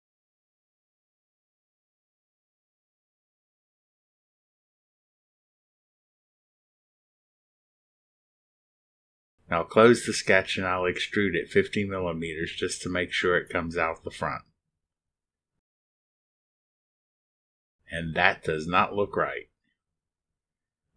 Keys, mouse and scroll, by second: 0.1 scroll up 2, 0.8-1.7 drag, 3.7-4.1 scroll up 2, 5.9 click, 7.6 scroll up 1, 8.1 click, 10.5 click, 11.9 click, 13.8 click, 15.7 KP_5, 15.8 KP_0, 17.4 click.